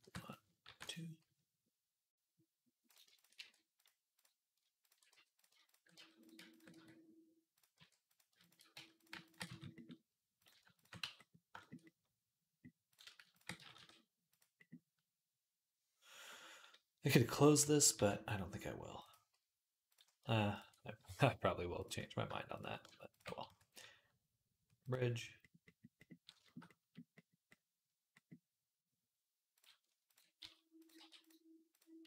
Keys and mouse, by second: 0.5 ctrl+r, 2.7 click, 3.2 e, 3.9 click, 4.9 f, 5.1 click, 5.8 f, 6.0 click, 6.1 ctrl+middle click, 6.3 ctrl+click, 6.4-8.2 middle drag, 6.5 f, 7.6 e, 8.2 ctrl+click, 8.3 ctrl+middle click, 8.6 f, 9.0 ctrl+click, 9.1-13.1 ctrl+middle drag, 9.3 f, 10.5 ctrl+click, 10.5 ctrl+right click, 10.8 f, 13.1 ctrl+click, 13.2-19.7 middle drag, 13.4 g, 17.8 ctrl+r, 19.7 click, 19.8-21.6 ctrl+middle drag, 21.6 click, 22.4-29.9 ctrl+shift+middle drag, 23.3 q, 29.9 ctrl+click, 30.0-32.0 middle drag, 30.2 s, 30.8 g.